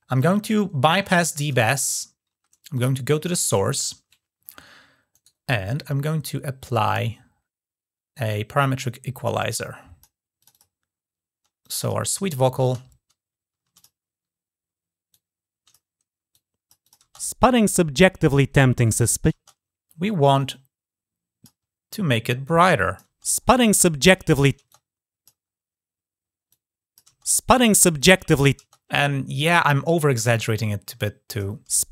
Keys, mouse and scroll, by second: 0.2 click, 1.2 click, 2.5 click, 4.9 right click, 8.3 click, 9.3 click, 10.2 click, 10.3 click, 11.4 click, 13.5 click, 14.9 click, 16.1 click, 16.6 click, 17.4 click, 20.1-21.2 drag, 21.5 scroll down 1, 21.9 scroll up 1, 22.2 click, 24.4 click, 25.3 scroll up 1, 25.5-26.1 scroll down 1, 26.1 scroll down 1, 26.3 click, 27.7 click, 30.0-31.2 drag.